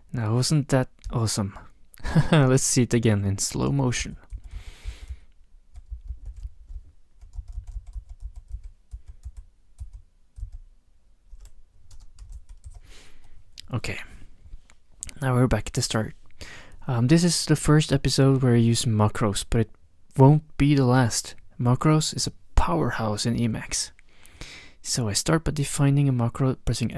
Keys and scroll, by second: 4.0 ctrl+shift+-, 4.3 ctrl+shift+-, 4.5 ctrl+shift+-, 4.9 ctrl+shift+-, 5.8 ctrl+shift+-, 6.2 ctrl+shift+-, 7.3 ctrl+shift+-, 8.0 ctrl+shift+-, 9.4 ctrl+shift+-, 11.0 ctrl+shift+-, 11.9 space, 12.3 ctrl+shift+-, 12.7 ctrl+shift+-.